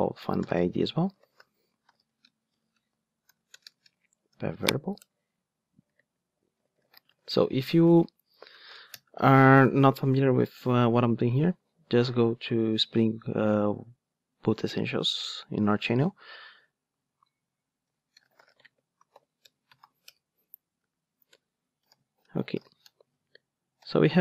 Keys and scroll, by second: 5.0 Return, 19.4 Return.